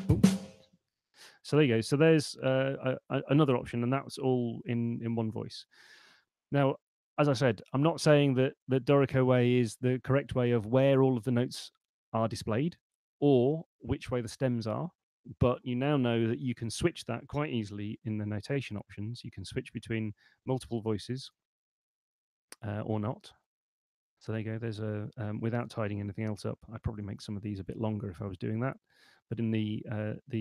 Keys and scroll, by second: 18.2 shift+super+n.